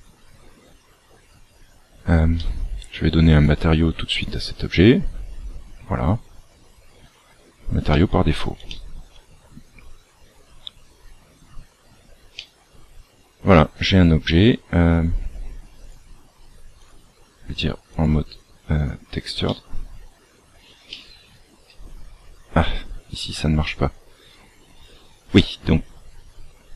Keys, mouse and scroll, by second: 0.6 scroll down 1, 2.3 middle click, 3.2 click, 4.0 click, 7.8 shift+middle click, 12.3 middle click, 15.7 click, 17.8 click, 19.4 middle click, 20.8 middle click.